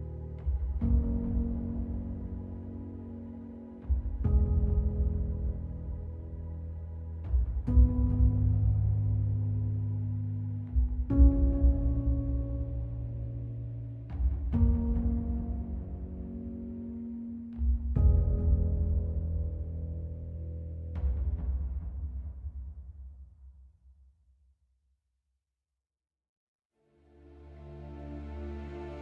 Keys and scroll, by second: 4.3 alt+x, 4.8 alt+x, 6.5 alt+x, 7.8 x, 9.9 ctrl+z, 11.2 z, 14.1 ctrl+alt+z, 14.8 z, 15.8 ctrl+z, 16.5 z, 17.5 ctrl+z.